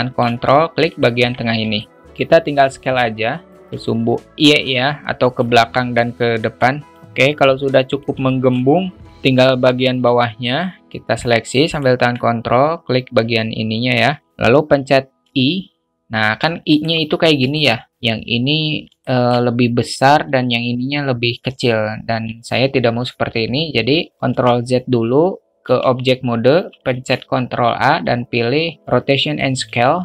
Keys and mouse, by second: 1.7 middle click, 2.2-3.5 drag, 3.8-5.3 alt+middle drag, 6.5 click, 7.3-8.0 alt+middle drag, 8.2 alt+shift+middle drag, 9.8 alt+shift+middle click, 10.1 a, 10.5 click, 17.5 alt+shift+middle click, 19.0 alt+shift+middle click, 24.3 ctrl+z, 25.6 Tab, 26.8 ctrl+a, 29.8 shift+middle click.